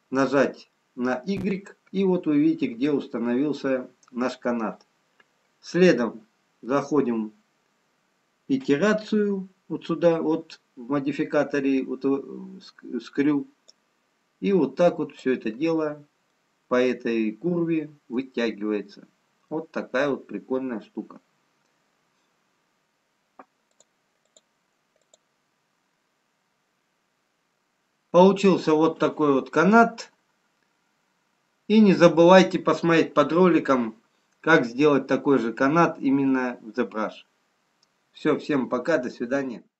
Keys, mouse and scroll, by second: 10.3-13.2 scroll up 1, 13.7 click, 17.3 middle click, 19.2-20.7 scroll up 1, 20.9 middle click, 22.8 click, 23.6 click, 24.9 click, 26.2-28.0 scroll up 2.